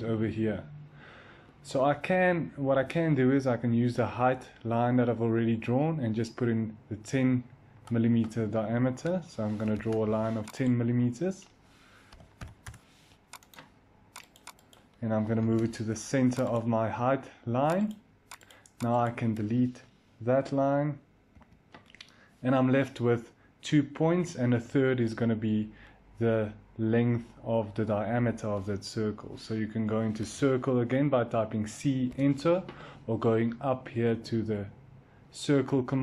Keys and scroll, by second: 9.5 i, 11.8-12.8 typing, 13.6 Return, 15.2 m, 21.3 Delete, 30.1 c, 31.9 Return.